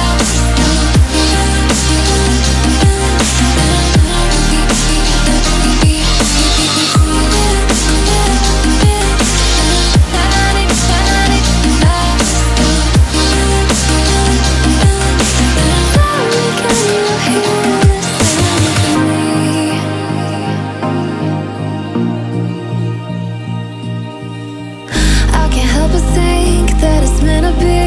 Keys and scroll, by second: 24.1 shift+d.